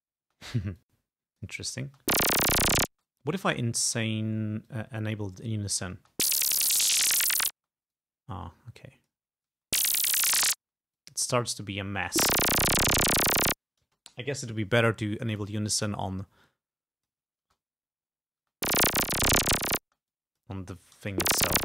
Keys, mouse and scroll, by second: 0.4 space, 0.9 click, 1.9 space, 3.0 space, 4.7-5.9 drag, 6.0 space, 7.6 space, 8.0-9.4 drag, 9.6 space, 10.7 space, 11.0 click, 12.0 space, 13.9 space, 15.4 click, 16.5 click, 17.5 space, 18.5 space, 19.9 space, 20.2 click, 21.0 space.